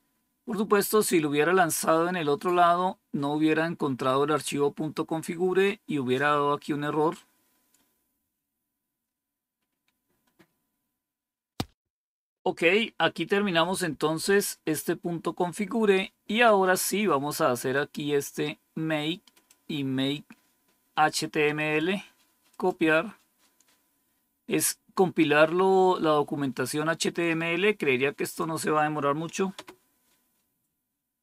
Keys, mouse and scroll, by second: 8.2 scroll down 3, 13.8 scroll down 2, 14.9 scroll down 4, 17.6-19.4 drag, 21.5 right click, 22.4 click, 27.1 right click, 28.1 click, 29.9 Return.